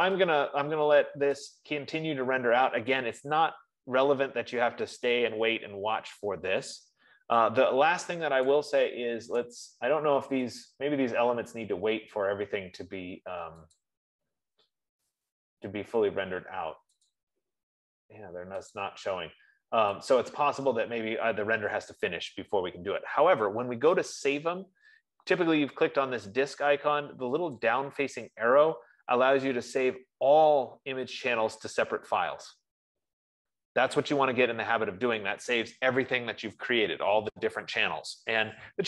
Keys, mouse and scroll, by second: 1.9-5.3 drag, 9.0 click, 9.8 click, 11.7 click, 14.4 click, 15.7 click, 17.6 click, 19.4 click, 20.7 click, 28.3 click, 32.8 click.